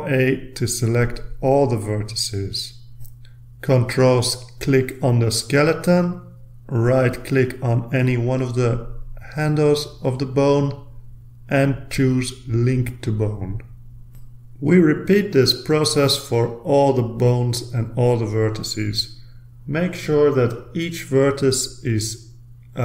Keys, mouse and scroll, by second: 2.4 ctrl+click, 5.3 middle click, 7.8 click, 13.9-15.3 ctrl+scroll up 3, 15.3-16.9 middle drag, 16.9-17.8 drag, 17.8-19.1 ctrl+middle drag, 19.1 ctrl+r, 19.9 click, 20.2 click, 20.5 ctrl+a, 21.0 ctrl+click, 21.4 middle click, 21.7 click, 22.2 click, 22.6 ctrl+click.